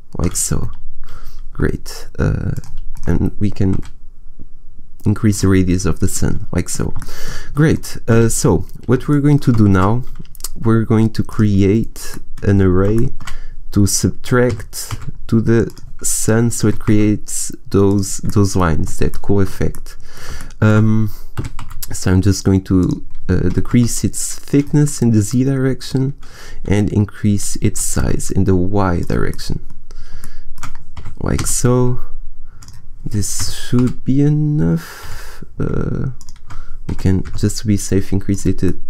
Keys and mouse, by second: 2.4 middle click, 2.8 right click, 3.6 s, 4.3 middle click, 6.0 click, 8.0 a, 14.4 g, 16.5 s, 18.2-19.5 drag, 21.3 s, 22.7 click, 23.4 s, 25.3 click, 25.7 middle click, 27.6 s, 29.0-30.3 drag, 30.9 g, 32.5-34.4 drag, 33.3 g, 36.1-37.2 drag, 36.9 s, 38.1 click, 38.6-38.8 drag.